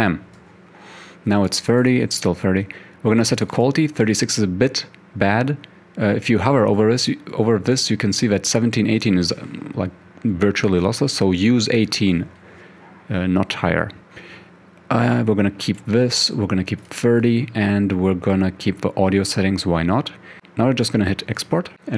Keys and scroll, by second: 11.5-12.3 typing.